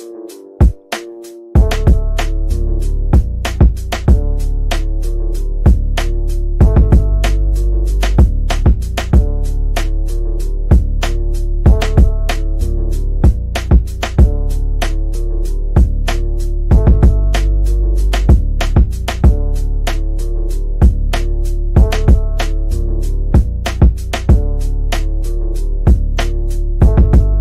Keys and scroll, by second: 22.4 F3, 22.9 Escape.